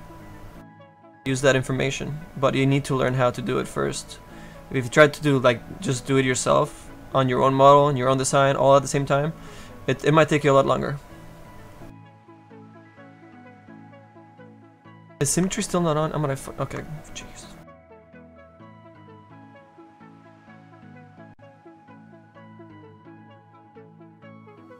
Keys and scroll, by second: 3.7 s, 14.0 z, 14.6 z.